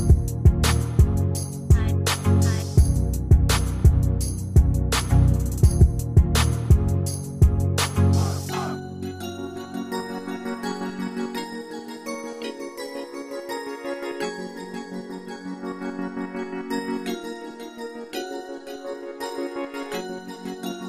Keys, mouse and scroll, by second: 6.1 ctrl+d, 12.1-12.5 ctrl+scroll down 1, 14.2 Right.